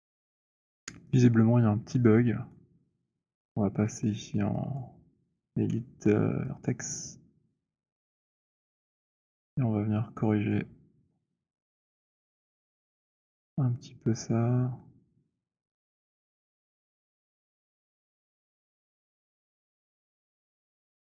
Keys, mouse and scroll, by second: 0.2 F7, 0.2 right click, 0.2 z, 2.7 right click, 5.1 click, 9.5 click, 10.8 click, 16.3 click, 17.5 click, 20.0 click.